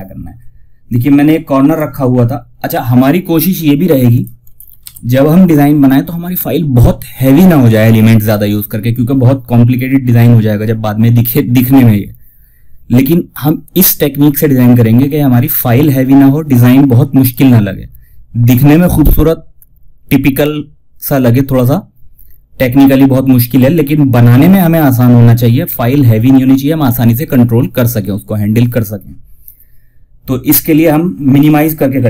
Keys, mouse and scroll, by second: 0.9 click, 3.4 click, 4.1 shift+F2.